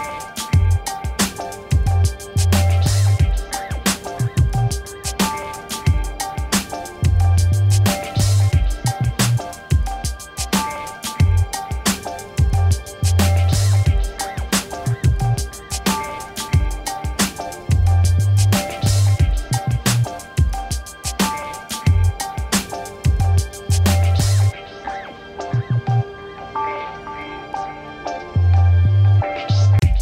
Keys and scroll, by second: 1.9 m, 5.5 BackSpace, 6.2 ctrl+d, 7.0 m, 9.4 ctrl+t, 13.3 Return, 13.9 ctrl+d, 14.2 ctrl+-, 17.3 ctrl+-.